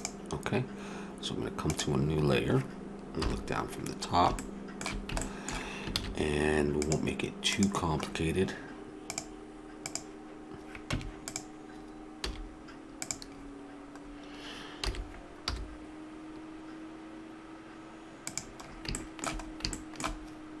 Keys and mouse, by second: 1.6-3.1 middle drag, 3.1 KP_7, 5.9 shift+a, 9.1 click, 10.9 Tab, 12.2 s, 14.8 s, 19.0-20.6 middle drag.